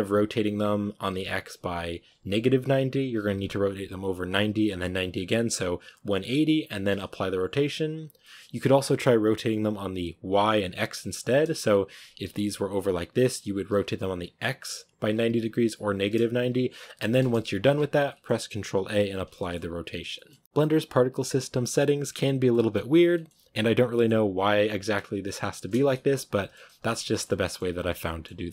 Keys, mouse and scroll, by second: 8.1-11.9 middle drag, 11.9 r, 13.6 r, 16.4 ctrl+z, 16.5 ctrl+z, 17.1 middle click, 17.5 ctrl+shift+z, 17.9-19.6 middle drag, 19.6 a, 20.0-20.4 middle drag, 20.4 a, 22.4-22.7 middle drag, 22.7 scroll up 1, 23.0-24.5 middle drag, 24.5 right click, 25.6-26.3 scroll down 3, 26.3 shift+middle drag, 26.4 scroll up 3, 26.7 a, 27.0-27.9 shift+middle drag, 27.9 scroll up 1, 28.0-28.5 middle drag.